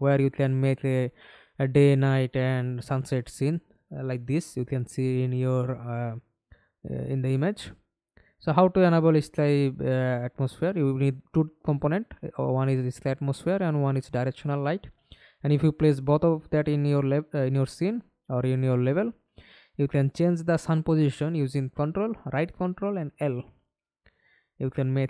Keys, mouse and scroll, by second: 2.0-2.6 scroll down 4, 4.5 scroll down 2, 5.1 scroll down 1, 6.2 scroll down 1, 7.1-10.2 scroll down 2, 12.0-15.8 scroll down 14.